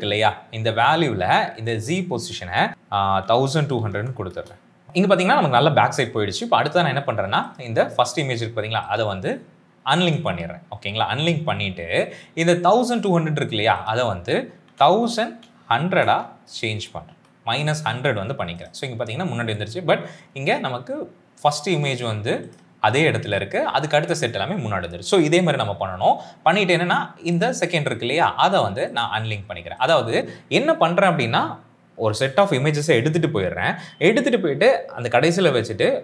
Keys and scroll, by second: 2.7 BackSpace, 3.0 1, 3.2 2, 3.7 0, 4.2 Return, 14.6 1, 15.8 0, 16.0 0, 17.0 Return.